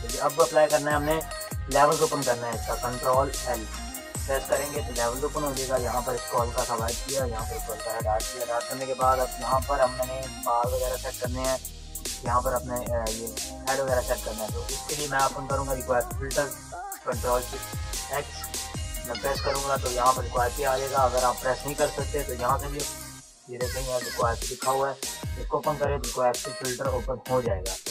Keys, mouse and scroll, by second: 1.5 ctrl+l, 2.5 Escape, 3.4 ctrl+l, 4.8-7.5 drag, 7.5 Return, 8.0 ctrl+=, 8.4 ctrl+space, 8.6 click, 9.0 ctrl+=, 14.1 ctrl+=, 14.2 ctrl+-, 14.4 ctrl+=, 14.6 ctrl+-, 20.3 Escape, 21.4 click, 24.9 click.